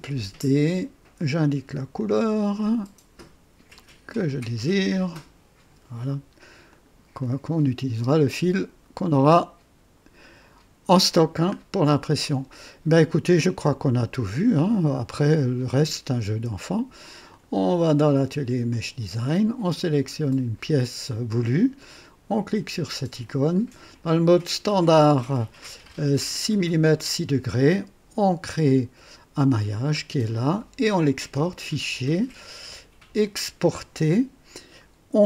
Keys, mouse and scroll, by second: 1.9 click, 3.7 click, 4.8 click, 6.0 click, 6.7 click, 7.2-8.2 drag, 8.3-11.1 drag, 11.2-11.6 scroll down 1, 11.8 click, 13.4 click, 14.2 right click, 17.2 click, 18.6 click, 20.2 click, 23.2 click, 28.4 click, 29.8 scroll down 2, 30.3 click, 31.5 click, 33.5 click.